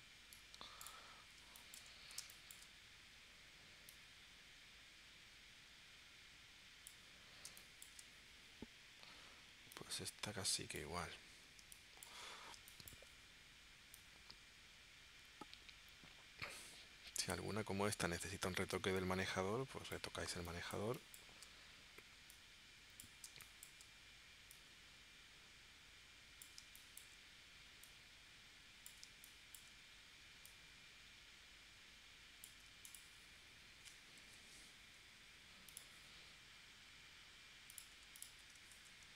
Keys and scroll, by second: 1.4 space, 2.2 space, 7.5 space, 11.6 space, 12.6 space, 20.3 space, 23.3 space, 26.6 space, 29.0 space, 34.2 p, 38.7 shift+c.